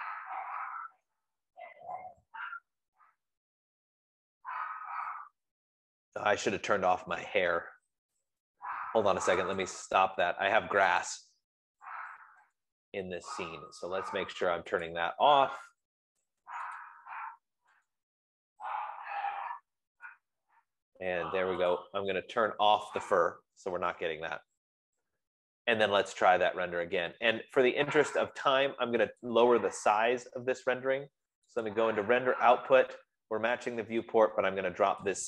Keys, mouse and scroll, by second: 10.1 click, 11.4-17.8 drag, 12.2 middle click, 17.8-18.1 scroll, 20.7 click, 25.5-27.3 drag, 29.7 click, 32.0 click, 32.3 F15.